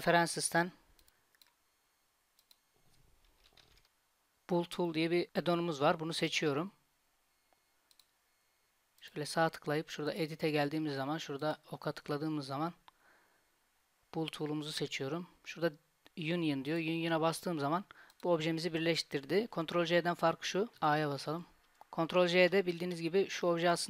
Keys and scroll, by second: 19.7 Tab, 20.8-22.8 typing.